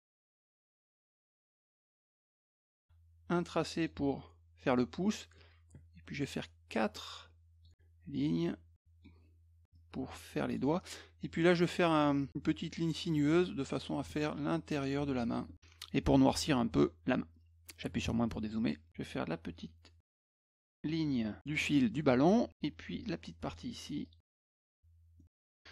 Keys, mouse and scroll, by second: 0.0 shift+click, 1.0 shift+click, 2.4-3.9 shift+drag, 5.4 shift+click, 7.0 shift+click, 8.4 shift+click, 9.7 shift+click, 12.3 shift+click, 14.4 shift+click, 18.9-20.8 drag, 23.0 shift+click, 24.0 shift+click, 24.4 shift+click, 25.2 middle click.